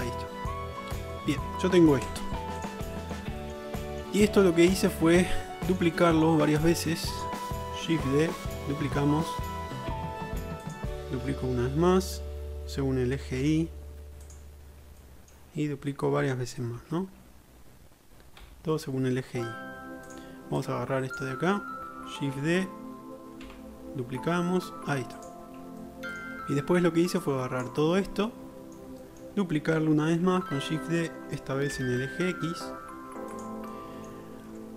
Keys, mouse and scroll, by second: 2.1 Tab, 2.7 click, 2.8-7.3 middle drag, 8.3 shift+d, 11.8 shift+d, 14.1-16.0 middle drag, 16.8 shift+d, 20.9-25.5 drag, 22.4 shift+d, 25.5 middle click, 25.9-26.6 middle drag, 27.3-28.2 drag, 28.6 alt+middle click, 29.0-29.4 shift+middle drag, 29.8 shift+middle click, 30.2 shift+d.